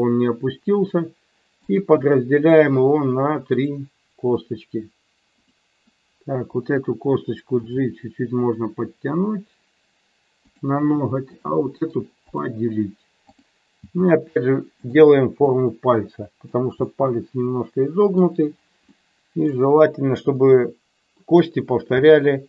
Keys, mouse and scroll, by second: 0.8 click, 1.6 right click, 5.3 click, 7.6 g, 10.5 click, 11.2 click, 13.2 click, 13.8 g, 14.8 click, 15.5-16.6 middle drag, 16.8-18.2 middle drag, 18.8 middle click, 20.5 click, 21.9 e.